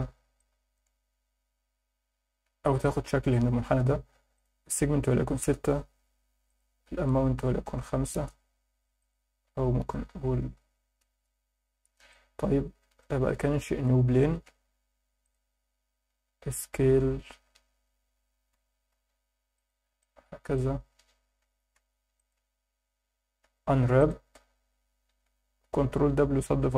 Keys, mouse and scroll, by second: 0.4 alt+middle click, 1.0 scroll down 2, 4.4-5.4 drag, 6.5-8.1 drag, 9.0-11.0 drag, 12.1-13.0 alt+middle drag, 13.8 shift+c, 14.1 shift+a, 17.3 s, 18.0 2, 18.5 ., 18.9 7, 19.5 click, 20.0-20.5 alt+middle drag, 21.4 g, 21.8 z, 22.2 click, 22.3 Tab, 23.4 u, 24.6 Tab, 25.2 Tab, 25.9 ctrl+w.